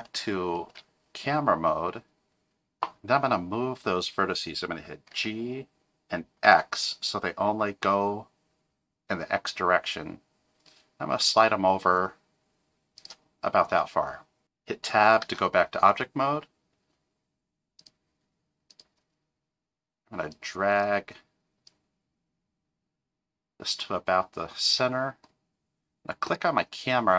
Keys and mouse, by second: 0.7 KP_0, 5.1 g, 15.2 Tab, 17.8 click, 18.7 click, 20.4 click, 21.7-24.7 drag.